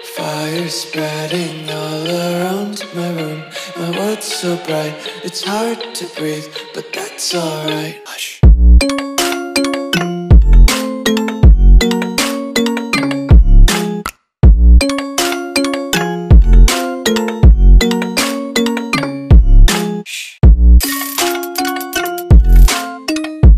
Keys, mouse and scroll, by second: 0.1 s, 1.2 click, 5.3 Delete, 5.9 click, 8.0 s, 8.9 click, 12.5 Delete, 13.4 click, 15.2 ctrl+s, 15.9 click, 19.5 Delete, 20.3 click, 21.8 ctrl+t.